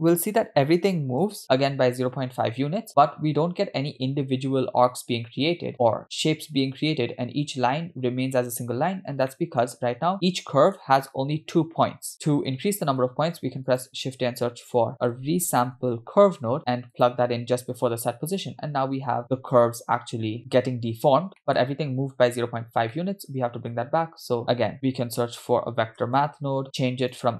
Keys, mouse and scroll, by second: 8.9-9.3 scroll up 3, 9.3 middle click, 10.2 middle click, 10.2 scroll down 2, 11.5-11.8 scroll up 1, 12.1 middle click, 13.4 shift+a, 21.4 middle click, 22.9 middle click, 24.4 shift+a.